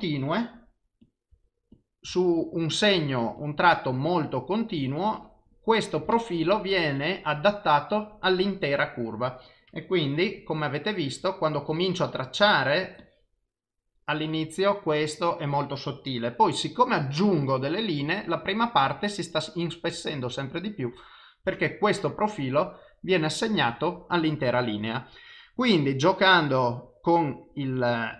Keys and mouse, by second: 11.7 click, 12.4 e, 13.0 click, 22.4 click, 24.7 click.